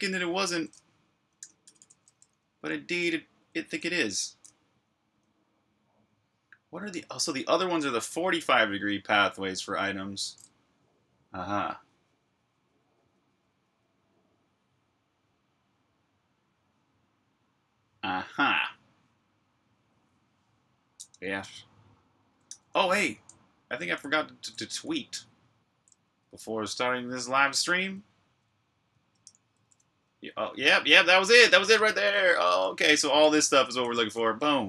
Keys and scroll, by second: 0.0-5.2 typing, 5.3 super+h, 20.1 Tab, 20.3 typing, 22.4-25.7 typing, 28.1-30.4 typing, 31.7 super+q, 32.5-34.6 typing.